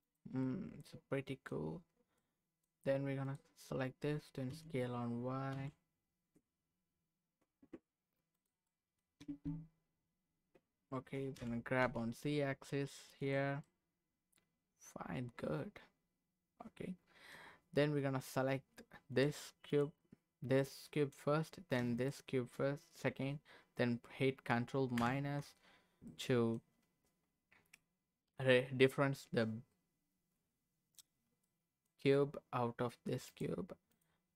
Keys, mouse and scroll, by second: 0.0 click, 0.4 middle click, 2.1 middle click, 3.2 click, 4.5 s, 5.5 y, 8.3 click, 8.6 middle click, 9.2 Tab, 11.4 g, 11.8 z, 13.2 click, 13.6-17.4 middle drag, 19.1 click, 19.7 click, 20.6 middle click, 22.0 shift+click, 25.0 ctrl+KP_Subtract, 26.1 middle click, 26.9-28.0 scroll up 1, 31.4 middle click, 33.2 click, 33.9 click.